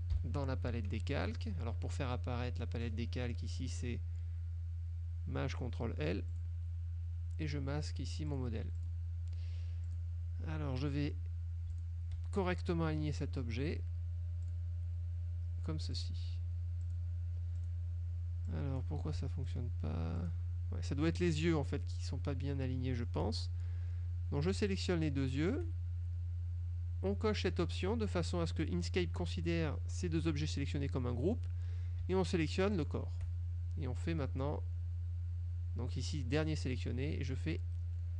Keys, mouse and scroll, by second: 0.3 ctrl+shift+l, 3.7 click, 6.4 click, 8.4 click, 8.9 click, 9.9 click, 11.8 shift+click, 14.5 click, 16.0 click, 16.9 click, 17.7 click, 18.5 click, 19.1 ctrl+z, 19.5 ctrl+click, 20.3 click, 24.8 shift+click, 32.9 shift+click.